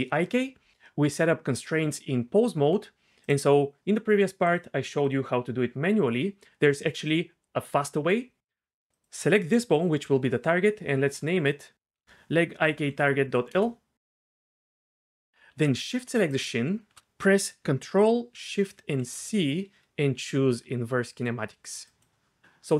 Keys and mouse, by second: 0.7 Tab, 1.3 Tab, 3.2 click, 4.5 click, 5.0-6.2 drag, 11.1 F2, 13.9 shift+BackSpace, 18.7 ctrl+shift+c.